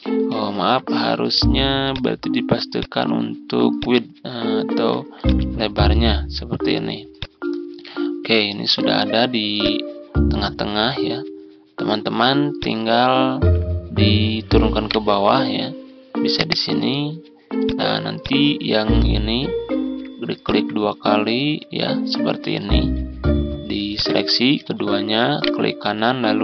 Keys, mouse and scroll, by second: 0.5 ctrl+z, 1.7 click, 5.1 shift+click, 5.5-6.2 typing, 7.7 ctrl+scroll up 1, 8.4-8.9 scroll up 1, 9.4 click, 13.2 ctrl+z, 14.7 right click, 16.3 click, 20.3-23.8 shift+drag, 24.7 ctrl+z, 25.3 right click.